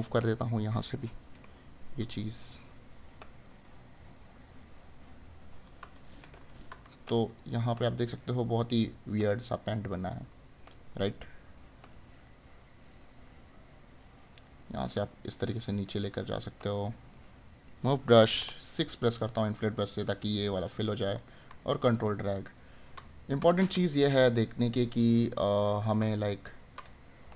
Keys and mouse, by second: 3.1 right click, 6.1 right click, 10.8 right click, 18.8 right click, 21.6 right click, 26.2 right click.